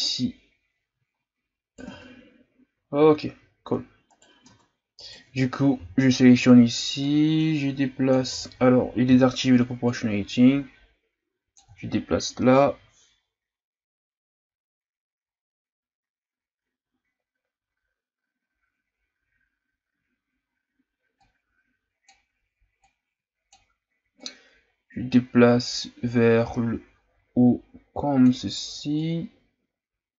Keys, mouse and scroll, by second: 0.0 right click, 1.9 Tab, 2.8-3.5 scroll down 4, 3.5-4.1 scroll up 2, 4.1 right click, 4.5 Tab, 5.0 right click, 5.8 l, 7.0-8.3 drag, 8.3 ctrl+z, 9.0 o, 9.8-30.1 drag.